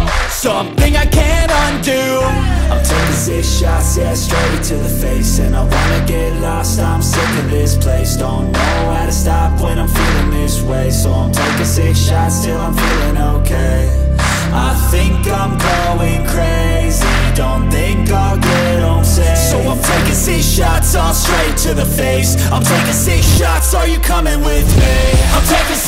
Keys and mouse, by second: 1.3 click, 5.1 click, 8.9 click, 10.9 click.